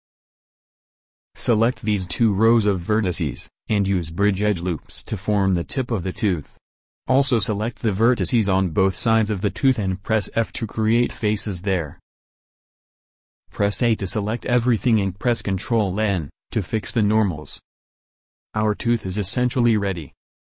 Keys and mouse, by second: 1.1-2.3 drag, 2.3-4.0 middle drag, 4.0-6.3 right drag, 5.0 w, 6.7-7.7 middle drag, 8.4 a, 9.9 f, 10.2 a, 12.3 f, 14.2 a, 14.4 a, 15.5 ctrl+n.